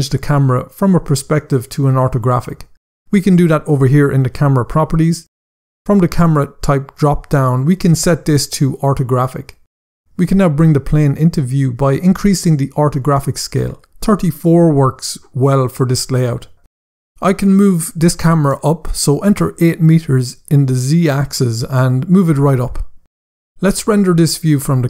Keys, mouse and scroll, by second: 4.6 click, 7.1 click, 14.5 click, 14.9 typing, 16.0 Return, 18.5 click, 19.2-19.8 typing, 20.2 Return.